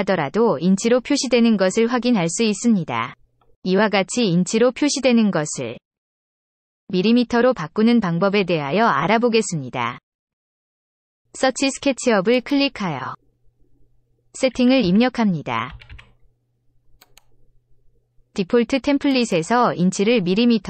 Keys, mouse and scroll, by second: 12.3 click, 14.7 e, 15.6 t, 15.8 t, 17.0 click, 19.1 click.